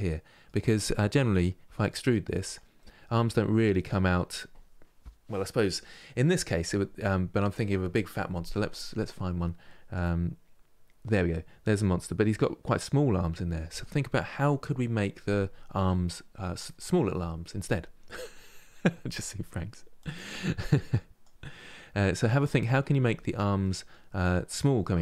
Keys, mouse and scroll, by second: 1.3 e, 2.5-22.4 middle drag, 22.4 ctrl+z, 22.7 ctrl+z, 23.3-24.7 middle drag, 24.7 shift+click.